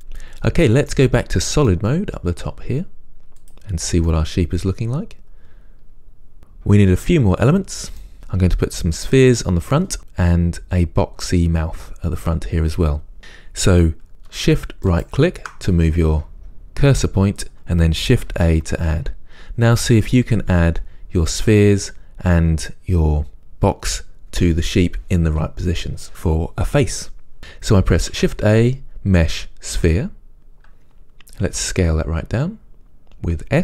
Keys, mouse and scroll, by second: 1.1-3.6 middle drag, 3.6-4.2 drag, 4.2-15.0 middle drag, 15.0-27.4 shift+right drag, 27.5-30.1 right drag, 30.1 shift+a, 31.6 s.